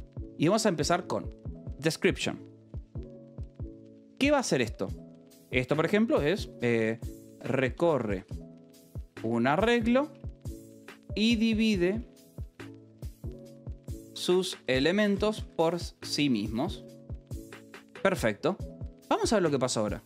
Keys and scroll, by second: 3.4 ctrl+g, 3.4 space, 7.1-16.9 typing, 17.6 Escape.